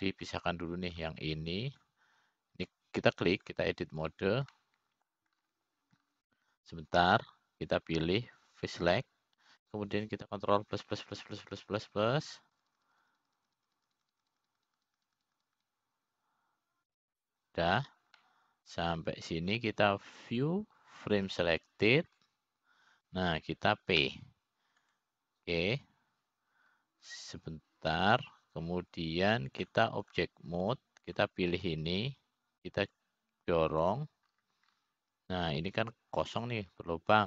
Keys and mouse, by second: 0.5 middle click, 2.3 click, 3.5 click, 4.3 click, 6.0 click, 7.1 middle click, 11.6 click, 13.2 ctrl+KP_Add, 13.4 ctrl+KP_Add, 13.6 ctrl+KP_Add, 13.7 ctrl+KP_Add, 13.9 ctrl+KP_Add, 14.1 ctrl+KP_Add, 14.2 ctrl+KP_Add, 14.3 ctrl+KP_Add, 14.6 ctrl+KP_Add, 14.6 ctrl+KP_Add, 14.8 ctrl+KP_Add, 15.0 ctrl+KP_Add, 15.1 ctrl+KP_Add, 15.3 ctrl+KP_Add, 15.5 ctrl+KP_Add, 15.6 ctrl+KP_Add, 15.7 ctrl+KP_Add, 16.0 ctrl+KP_Add, 16.1 ctrl+KP_Add, 16.4 ctrl+KP_Add, 16.5 ctrl+KP_Add, 16.7 ctrl+KP_Add, 16.9 ctrl+KP_Add, 17.0 ctrl+KP_Add, 17.3 ctrl+KP_Add, 17.7 ctrl+KP_Add, 17.9 ctrl+KP_Add, 18.0 ctrl+KP_Add, 18.2 ctrl+KP_Add, 19.5 ctrl+KP_Subtract, 20.7-21.9 middle drag, 22.9-23.9 drag, 26.7 p, 32.2 click, 33.7 click, 35.6 click.